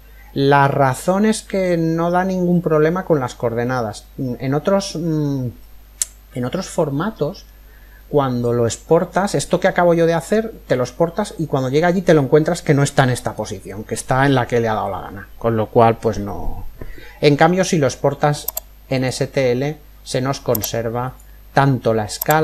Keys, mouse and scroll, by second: 2.0-5.0 middle drag, 7.5-11.2 middle drag, 18.5 click, 20.6 click.